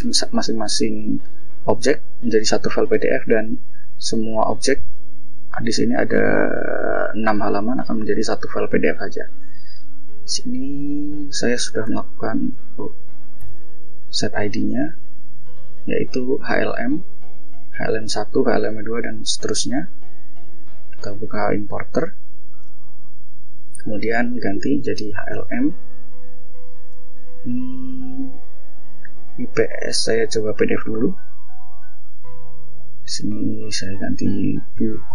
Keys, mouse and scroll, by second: 2.5 click, 3.0-3.3 ctrl+scroll down 2, 5.1-5.4 scroll down 2, 5.6 scroll up 2, 5.9-6.4 shift+scroll down 2, 6.8-7.6 shift+scroll up 4, 8.0-8.5 ctrl+shift+scroll up 3, 9.6 click, 11.3 ctrl+shift+o, 12.9 ctrl+shift+o, 14.7 click, 16.9 click, 19.1 click, 21.3 click, 23.3 click, 24.1-25.3 typing, 28.3 click, 30.2 click, 32.1 click, 34.0-35.1 typing.